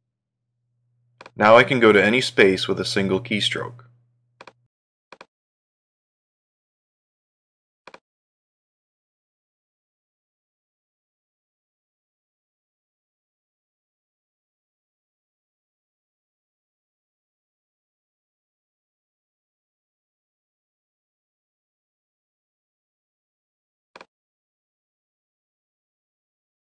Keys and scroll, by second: 3.0 ctrl+3, 11.5 ctrl+2, 14.0 ctrl+3, 16.5 ctrl+4, 19.2 ctrl+1.